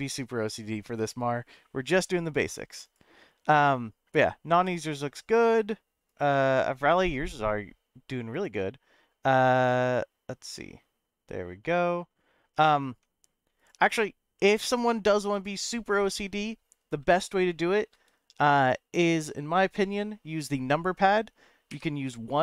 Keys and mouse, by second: 17.1 middle click, 18.5 shift+middle click, 21.7 KP_1.